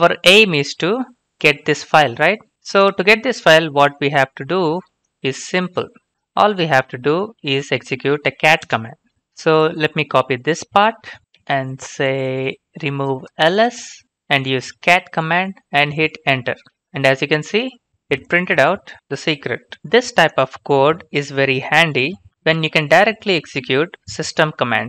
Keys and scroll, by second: 2.5 ctrl+c, 3.7 ctrl+v, 6.1 ctrl+c, 6.6 ctrl+v, 7.7-8.8 typing, 10.4 typing, 11.2 ctrl+c.